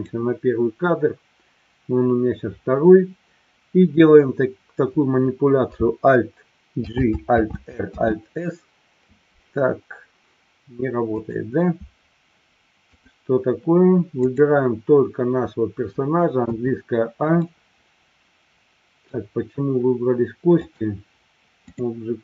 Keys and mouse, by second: 0.5-1.5 drag, 6.8 alt+g, 7.3 alt+r, 7.9 alt+s, 11.0 click, 14.3-15.0 drag, 16.5 a, 17.4-19.2 middle drag, 20.6-21.9 drag.